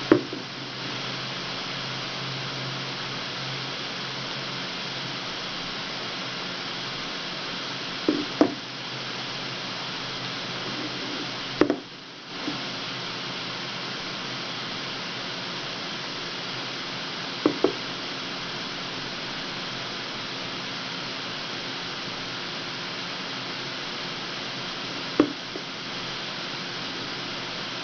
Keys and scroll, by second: 1.0 w, 12.3 w, 19.3 w, 27.6 w.